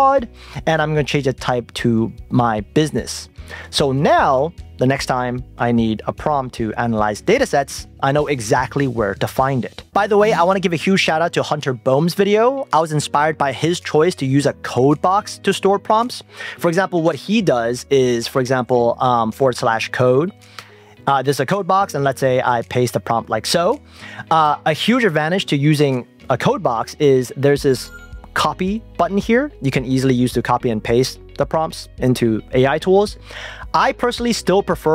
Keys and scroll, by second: 20.7 Return, 22.6 super+v.